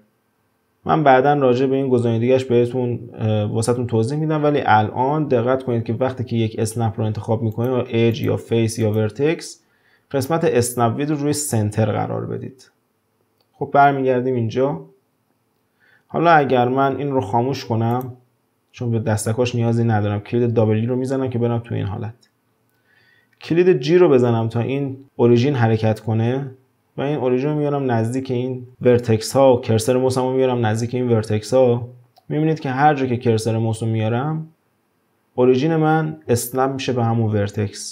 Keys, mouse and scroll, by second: 17.9 click, 20.6 w.